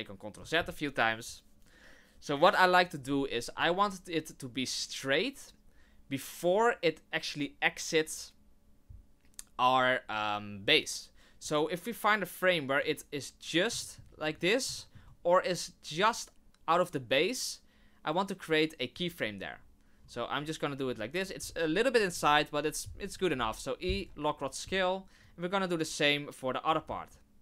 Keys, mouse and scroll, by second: 1.2 click, 3.1 middle click, 11.4 click, 13.8 shift+middle click, 14.1 scroll up 3, 14.7 shift+middle click, 16.0 click, 22.1 KP_1, 23.0-23.4 scroll up 3, 23.4 i, 25.2 click.